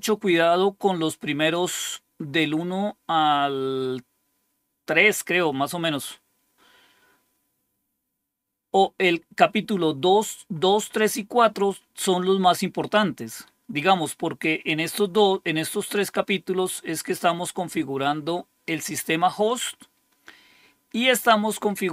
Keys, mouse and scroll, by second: 0.6-1.4 scroll down 2.